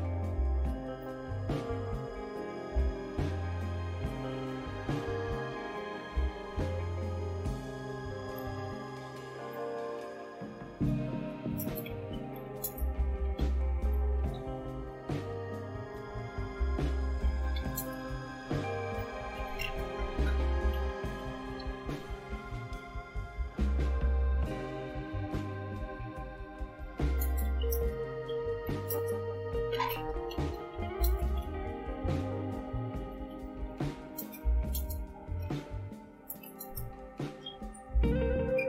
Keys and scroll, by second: 0.5 l, 1.0 Return, 8.1-9.5 typing, 10.7-22.3 typing, 26.7-36.5 typing, 38.1 typing.